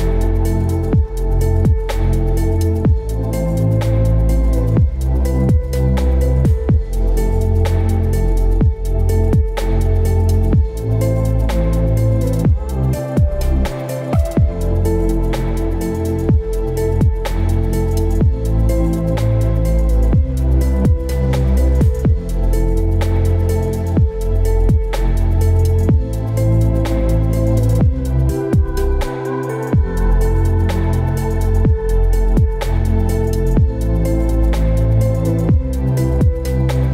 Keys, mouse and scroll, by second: 3.4 shift+click, 5.3 ctrl+g.